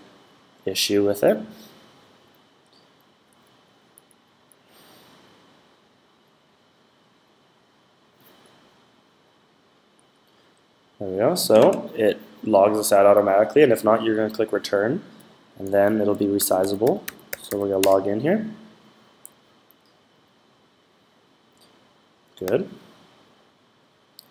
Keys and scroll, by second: 16.1-17.8 typing.